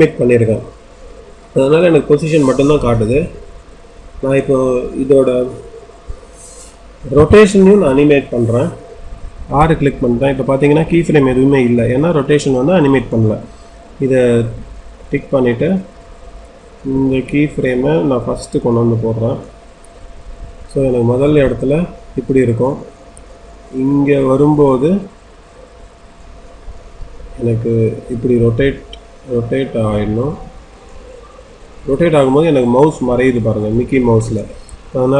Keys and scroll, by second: 7.1 r.